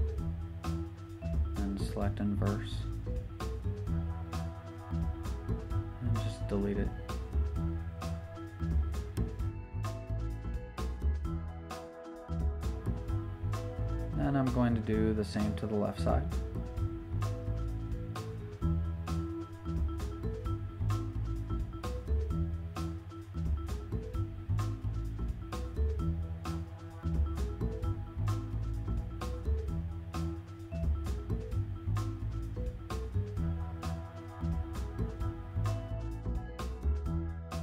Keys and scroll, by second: 3.8 super+z, 10.2 super+d, 27.4 super+d.